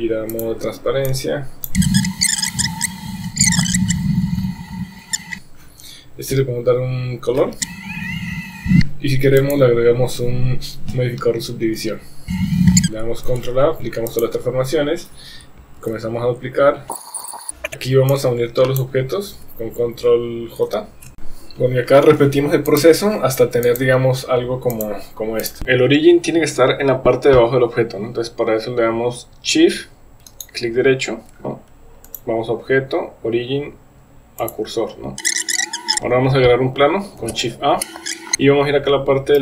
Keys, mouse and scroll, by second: 0.3 click, 1.2 click, 1.8-4.5 typing, 2.2 click, 2.9 shift+middle click, 3.7 click, 4.3 click, 4.5 click, 4.6 click, 5.0 middle click, 5.3 Tab, 8.0 click, 9.5-12.6 drag, 12.7 KP_1, 13.3 ctrl+a, 15.8 shift+d, 16.9 r, 17.0 shift+d, 17.2 shift+d, 17.4 g, 18.2-18.9 drag, 20.6 ctrl+j, 22.7 click, 23.6 click, 24.8 click, 25.4 click, 25.6 ctrl+a, 30.4 shift+right click, 32.1-34.6 drag, 35.5 click, 35.6 click, 37.2 shift+a, 38.0 middle click, 38.1 s, 38.3 KP_1.